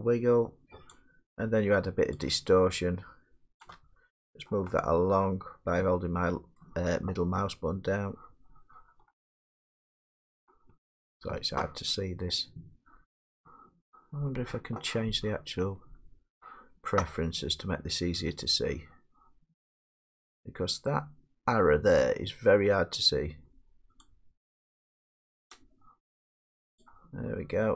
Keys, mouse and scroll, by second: 0.9 shift+click, 3.7 shift+click, 6.6 shift+middle click, 12.1 middle click, 12.3 middle click, 12.4 middle click, 12.9 shift+middle click, 23.5 middle click, 25.5 scroll, 25.5 shift+click.